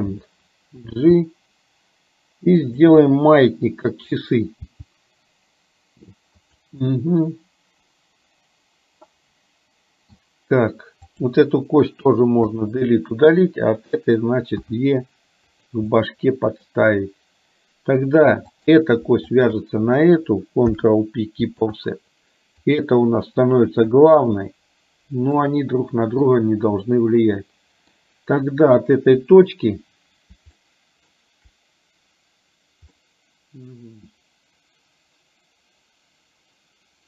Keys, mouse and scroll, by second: 1.0 g, 3.1-4.5 middle drag, 4.8 g, 7.0-10.3 middle drag, 12.1 Delete, 13.7 click, 14.7 e, 16.0 middle click, 18.7 click, 20.7 ctrl+p, 22.7 click, 25.5 middle click, 27.0-28.1 middle drag, 29.3 KP_1, 30.7 shift+middle click, 33.1 middle click.